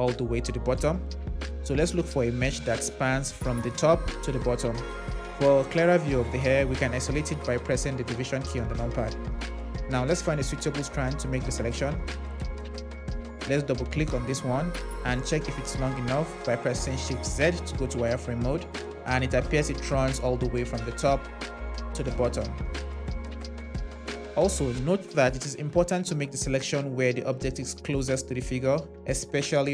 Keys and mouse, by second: 2.2 click, 13.8 click, 15.2 click, 16.8 shift+z, 23.3 z, 24.2 KP_Divide.